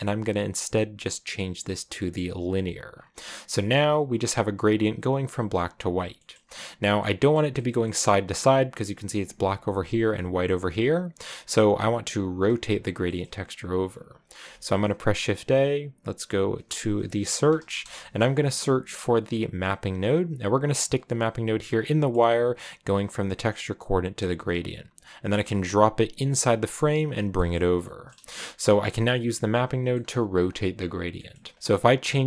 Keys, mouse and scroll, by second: 2.8 scroll down 5, 3.2-6.5 shift+middle drag, 6.5 click, 6.8 middle click, 7.1 scroll up 3, 7.3 middle click, 8.1-8.6 scroll up 1, 9.9 scroll up 1, 21.8 scroll down 3, 22.1-24.7 middle drag, 24.7 click, 28.1 shift+middle click, 28.5 shift+middle click, 28.9-31.0 scroll up 3, 31.0-32.2 middle drag.